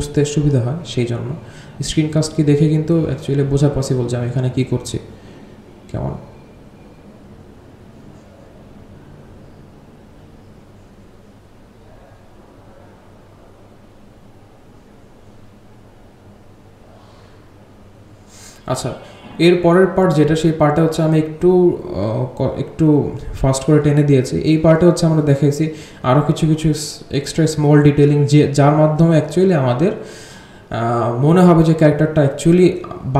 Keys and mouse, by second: 0.5-1.0 drag, 1.3 click, 1.6 click, 1.9-2.6 drag, 2.8 r, 3.0-3.4 drag, 4.1-4.7 alt+drag, 5.1-6.5 drag, 7.1 space, 13.5 space, 14.9 g, 15.5-16.7 drag, 17.1 middle click, 18.5 click, 19.0 g, 19.6 click, 20.5 g, 20.8-21.2 drag, 21.4 drag, 21.7 g, 22.2 g, 23.0-23.7 drag, 23.9 click, 24.1-24.5 drag, 24.8 g, 25.0 click, 25.3 g, 25.5-26.9 drag, 27.3 drag, 27.7 g, 27.9 click, 28.2 g, 28.7-29.5 drag, 29.7 middle drag, 30.5-31.7 drag, 32.0 space.